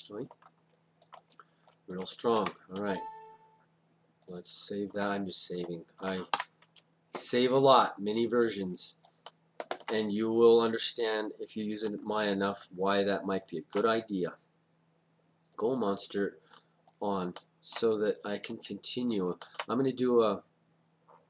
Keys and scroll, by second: 2.4 ctrl+s, 6.4 y.